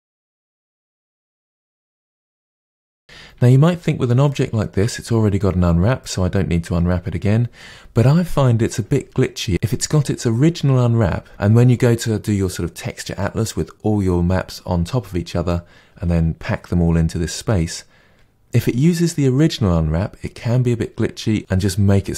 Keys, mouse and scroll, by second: 0.0-0.5 middle drag, 0.5 click, 0.5 Tab, 1.0 a, 1.3 u, 2.0 KP_Divide, 2.2 middle click, 2.4 ctrl+z, 2.5 ctrl+z, 3.0 KP_Divide, 4.2-22.1 shift+middle drag.